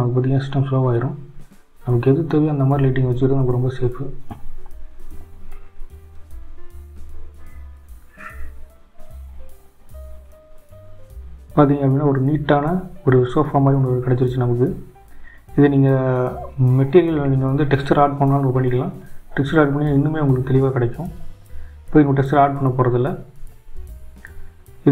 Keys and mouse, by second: 0.1 g, 4.3 click, 5.6 click, 6.8 g, 9.8 click, 11.4 click, 13.9 click, 16.0 click, 17.2 click, 18.1 click, 22.0-22.4 drag.